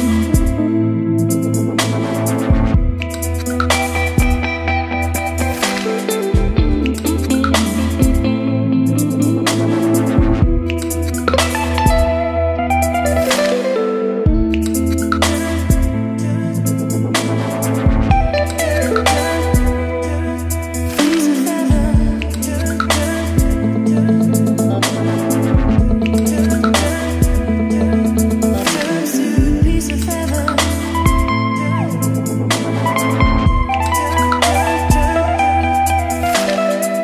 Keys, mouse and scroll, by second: 4.0-6.5 typing, 7.7-16.3 drag, 16.1-24.1 typing, 24.9 Right, 25.3-27.2 typing, 28.8 click, 29.7 Tab, 32.7-35.6 typing, 36.8 Return.